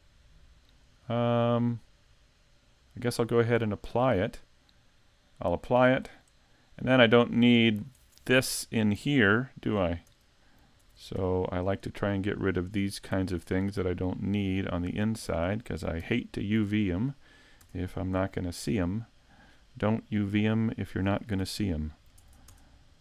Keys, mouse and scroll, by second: 1.0-1.6 scroll up 2, 1.6 right click, 1.6-2.4 scroll up 1, 2.4 middle click, 5.9 click, 7.2 click, 8.0 middle click, 8.6-9.1 scroll up 5, 9.1 shift+middle click, 10.1 Tab, 10.8 ctrl+Tab, 11.7 right click, 12.1 shift+right click, 12.6 right click, 13.2 right click, 13.5 middle click, 15.3 shift+right click, 16.0 x, 17.6 Tab, 18.6 click, 21.4 ctrl+Tab, 22.5 ctrl+Tab.